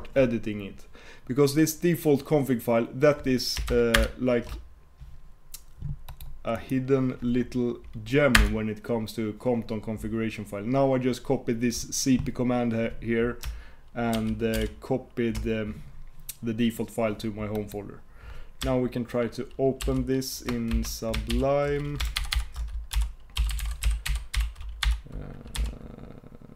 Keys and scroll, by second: 4.0 shift+super+Return.